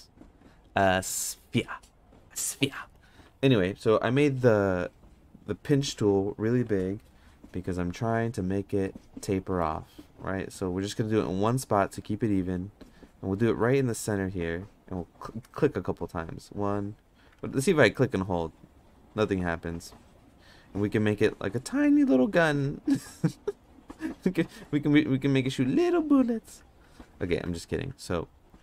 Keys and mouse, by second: 0.0 n, 8.8 middle click, 16.2 click, 17.3 ctrl+z, 18.0-20.4 drag, 21.7 Tab, 22.2 Tab, 26.5 ctrl+z, 26.8 ctrl+z, 27.1 ctrl+z, 27.4 ctrl+z.